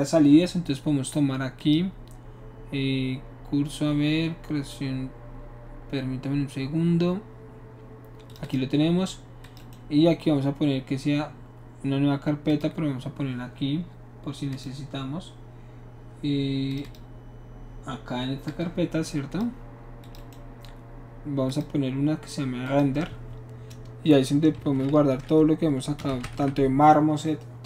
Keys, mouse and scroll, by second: 1.6 click, 8.3 click, 8.4 click, 9.4 click, 9.5 right click, 12.5 click, 14.5 click, 16.7 click, 16.8 click, 18.5 click, 20.0 click, 20.1 right click, 21.5 click, 22.6 click, 24.7-26.4 typing.